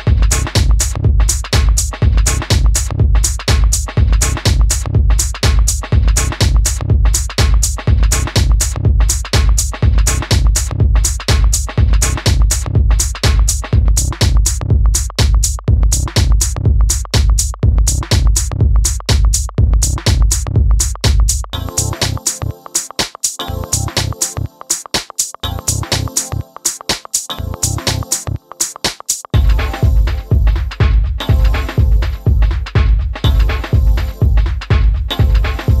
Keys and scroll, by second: 12.2 1, 12.4 Return.